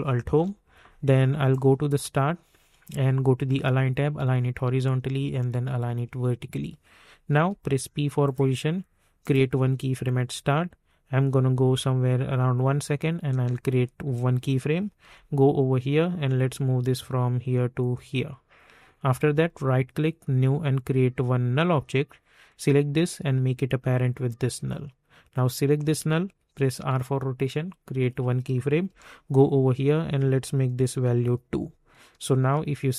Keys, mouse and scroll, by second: 0.2 ctrl+alt+Home, 1.5-7.4 drag, 7.4 p, 8.2 click, 12.3 click, 15.0 j, 16.0-18.9 drag, 19.4 right click, 20.2-25.4 drag, 26.7 r, 28.0 click, 28.8 k, 30.6 click, 31.0 2, 31.9 click, 32.4 space.